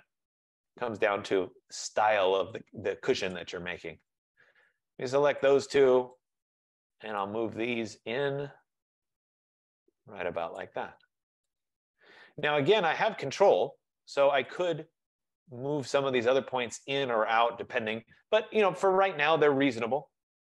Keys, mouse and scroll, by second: 0.5 scroll, 1.7 scroll, 2.7 click, 3.6 click, 4.4 shift+click, 6.2 click, 10.6 click, 12.8 middle click, 13.0 scroll, 14.0 scroll, 14.7 click.